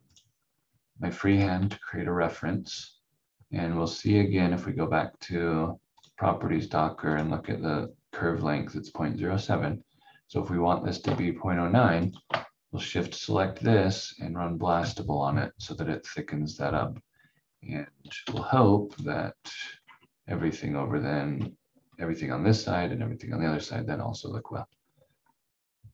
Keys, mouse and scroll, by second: 5.9 click, 12.0 shift+click, 18.2 F4, 18.9 click, 19.3 scroll up 1, 23.5-25.2 scroll down 1, 25.2-25.9 scroll up 1.